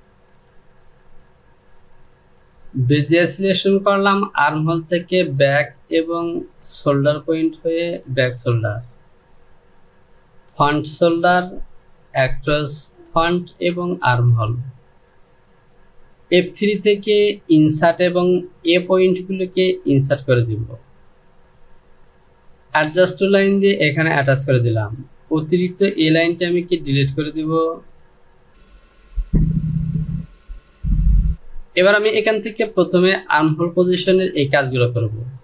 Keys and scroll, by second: 26.0 Delete.